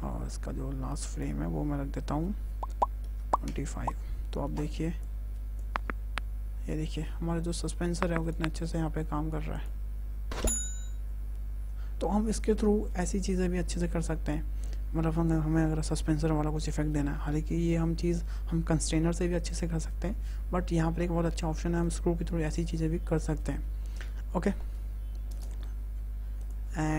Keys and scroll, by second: 2.9 KP_2, 3.2 KP_5, 3.3 Return, 5.6 space, 25.1 space.